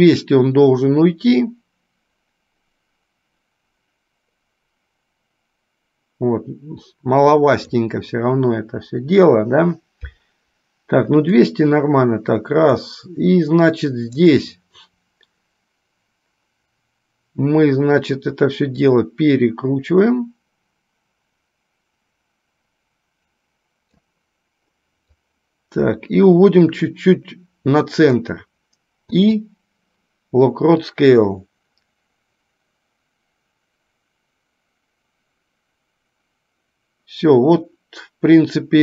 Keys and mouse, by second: 0.3-7.8 drag, 11.5-13.0 drag, 14.3 click, 19.3-24.3 drag, 25.5-28.6 drag, 31.1-38.8 drag.